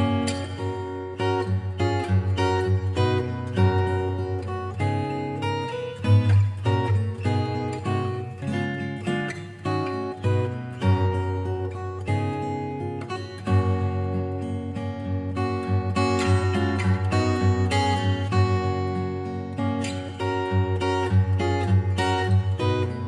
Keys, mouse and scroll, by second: 3.6 click, 4.9 click, 5.6 click, 7.8 click, 8.4 click, 10.4 click, 11.6 click, 13.9 click, 14.7 click, 15.7 click, 18.1 click, 19.8 click, 22.6 click.